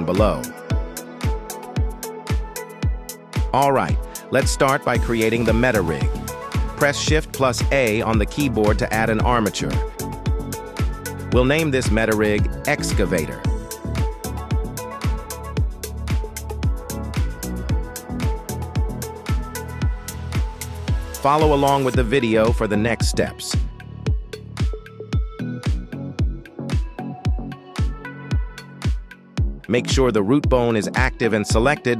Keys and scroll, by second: 6.9 shift+a, 12.3-14.3 typing, 14.4 Return.